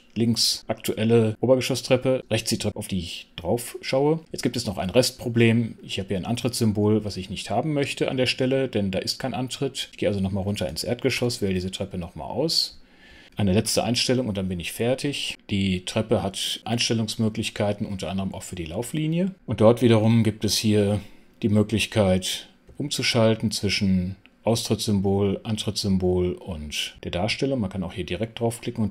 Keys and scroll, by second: 11.1 super+5, 13.5 super+t.